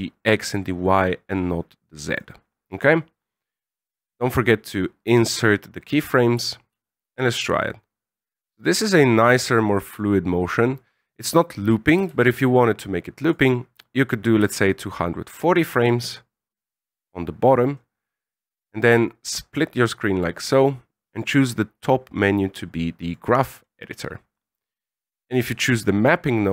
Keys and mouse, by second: 1.4 click, 3.4-5.1 right drag, 6.7 alt+a, 12.0 alt+a, 13.2 click, 14.4-16.7 ctrl+drag, 19.1-20.2 drag, 21.1-23.1 drag, 24.3 right click, 25.1 click.